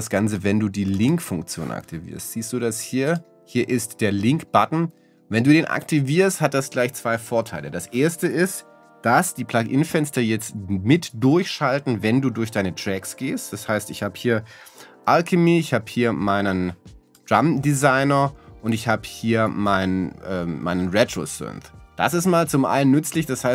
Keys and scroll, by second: 10.6 Down, 11.7 Down, 13.0 Down, 15.2 Up, 19.1 Up.